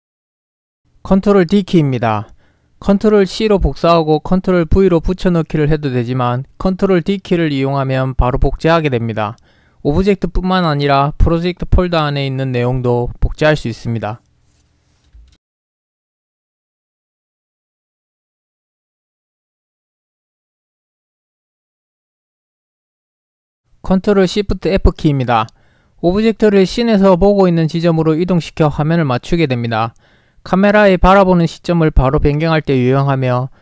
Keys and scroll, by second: 3.2 ctrl+c, 4.4 ctrl+v, 8.6 ctrl+d, 12.6 ctrl+d, 14.4 ctrl+d, 20.4 ctrl+d, 25.5 ctrl+shift+f, 31.4 ctrl+shift+f.